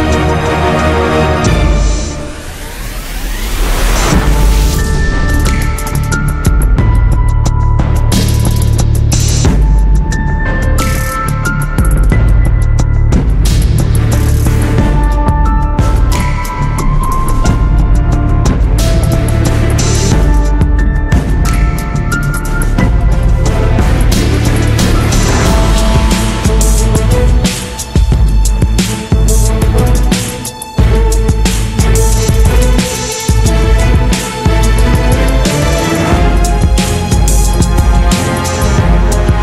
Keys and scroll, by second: 7.8 Return, 15.2 Return, 19.8 Return, 31.9 Escape.